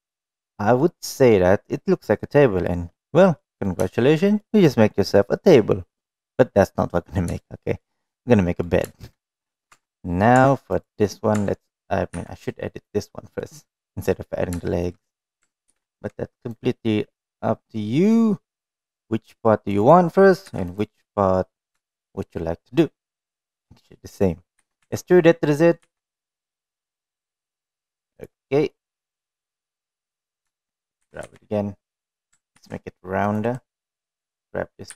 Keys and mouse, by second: 0.4-0.8 middle drag, 1.5-3.2 middle drag, 4.0 middle drag, 4.6 shift+middle drag, 5.0-5.5 middle drag, 6.2-6.7 middle drag, 8.0 shift+middle drag, 8.5 middle click, 9.0 middle drag, 9.6 shift+middle drag, 9.9-10.2 middle drag, 10.6 Tab, 10.6 middle click, 11.0 Tab, 12.7 Tab, 12.9 3, 13.1 click, 13.5 click, 14.1 middle click, 15.3 shift+middle click, 15.8 middle click, 16.4 ctrl+4, 16.4 ctrl+r, 21.2 3, 21.4 click, 21.8 middle click, 22.6 shift+middle click, 25.3 e, 29.5-30.9 middle drag, 31.8 g, 33.4 ctrl+r.